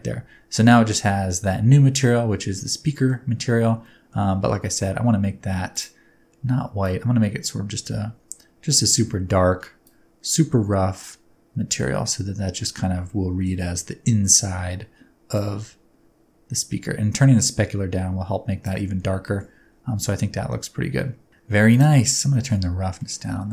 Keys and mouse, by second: 0.2 Tab, 2.6 middle click, 4.0 middle click, 10.0 click, 12.0 middle click, 13.1 middle click, 15.4-18.6 drag, 19.3 shift+middle click, 21.0 middle click, 21.7 click, 22.4 middle click, 22.9 middle click.